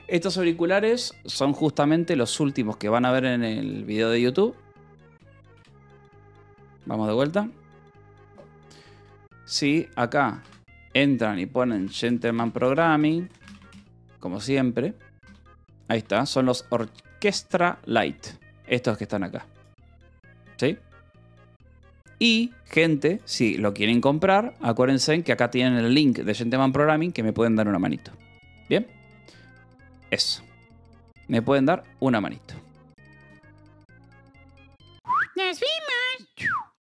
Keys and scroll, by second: 9.2 Delete, 9.2 Down, 9.2 Return, 10.1-12.8 typing, 14.0 t, 14.7 l, 16.3 m, 17.4-18.4 typing.